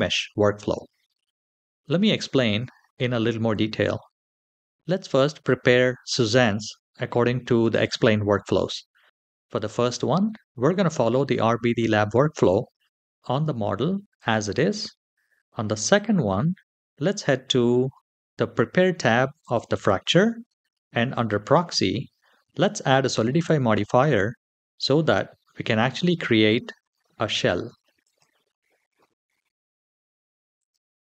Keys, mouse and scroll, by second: 1.0-1.7 scroll down 2, 1.7 shift+middle drag, 3.7 middle click, 15.6 click, 19.2 click, 20.9 click, 27.8 click, 28.7-29.5 scroll up 2, 29.5 middle click, 29.5 scroll up 1, 30.3 click.